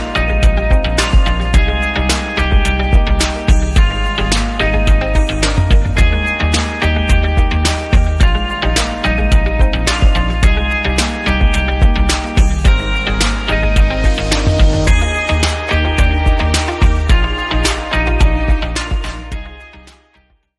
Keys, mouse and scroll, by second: 0.1 click, 1.3 click, 2.3 click, 5.5 ctrl+s, 7.2 click.